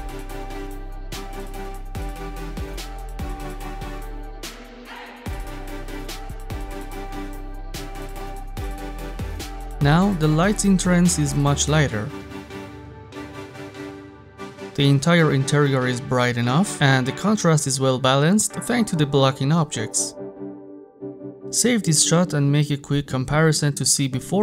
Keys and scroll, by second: 6.3 6, 6.5 Return.